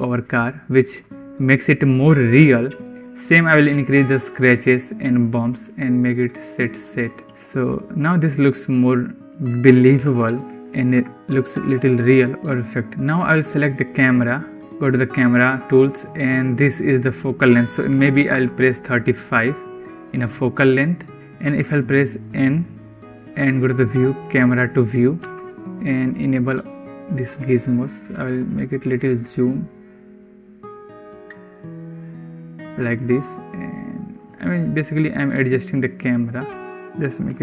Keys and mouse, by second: 0.3 shift+click, 0.4 shift+middle click, 0.5 shift+drag, 3.1-4.5 drag, 4.9 click, 6.4 click, 6.7 click, 7.2 shift+click, 7.9 shift+drag, 8.7-9.1 shift+drag, 9.8 Home, 10.7 ctrl+s, 17.2-18.8 drag, 21.5 n, 23.1 click, 24.1 click, 25.9 click, 26.1 click, 27.7-31.6 drag, 33.1 middle click, 34.2-36.6 shift+middle drag, 36.7 click.